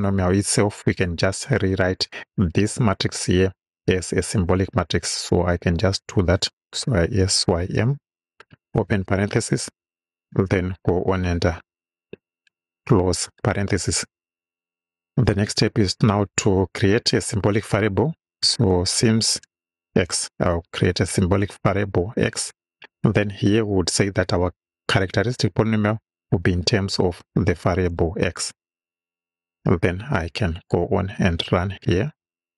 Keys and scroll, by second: 6.9-8.8 typing, 9.5 shift+Right, 11.8 Right, 12.8 shift+Right, 13.2 shift+o, 15.3 Return, 17.8-20.1 typing, 26.9 ,, 27.9 x, 29.5 Right.